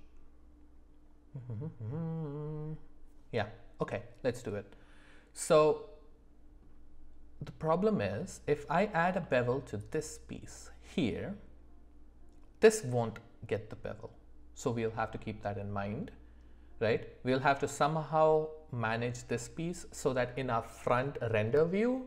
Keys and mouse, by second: 5.5-6.6 middle drag, 8.1 middle click, 9.2 shift+middle drag, 9.8 click.